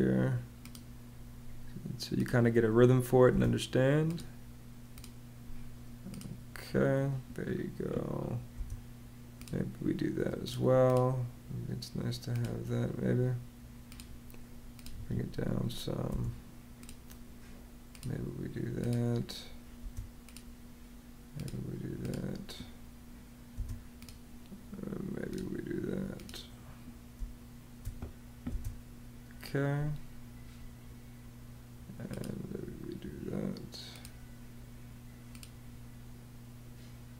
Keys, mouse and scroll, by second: 3.1 space, 8.3 space, 14.7 Escape, 15.9 space, 19.6 space, 23.3 space, 26.9 space, 28.3 space, 37.0 space.